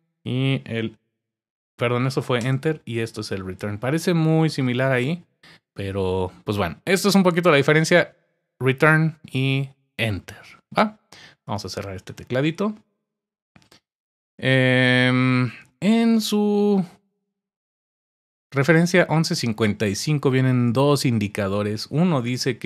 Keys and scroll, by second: 0.6 ⟲.